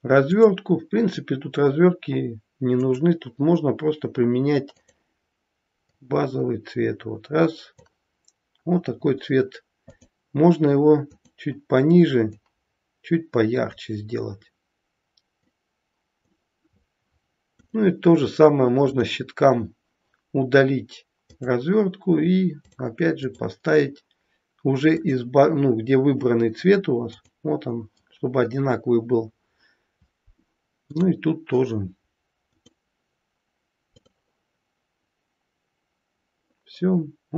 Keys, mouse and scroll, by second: 2.8 click, 9.8 click, 17.5 click, 18.8 click, 22.5 click, 23.0 click, 30.8 click, 32.5 click.